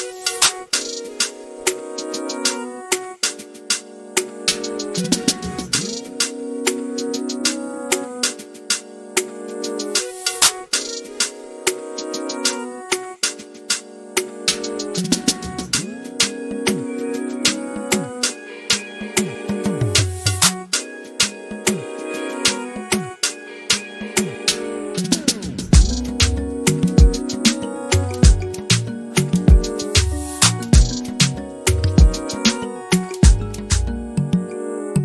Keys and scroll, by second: 2.8-3.6 typing, 6.9 typing.